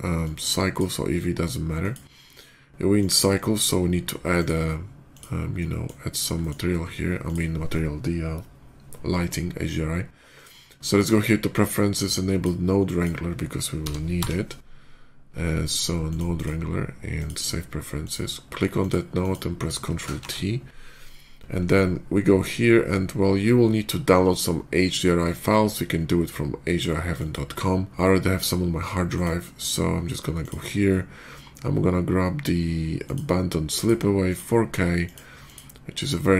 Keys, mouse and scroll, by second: 0.1 click, 1.6 click, 2.8 click, 4.2 click, 5.0 click, 5.4 middle click, 5.8 middle click, 6.2 middle click, 7.1 click, 10.2 click, 10.8 click, 11.9-12.2 drag, 12.7 click, 15.9 click, 16.2 click, 17.0 click, 17.9 click, 18.6 click, 19.0 click, 20.0 ctrl+t, 27.0 click, 27.4 click, 30.2 click, 32.9 click, 33.6 click, 34.1 click, 34.9 click, 35.3 click.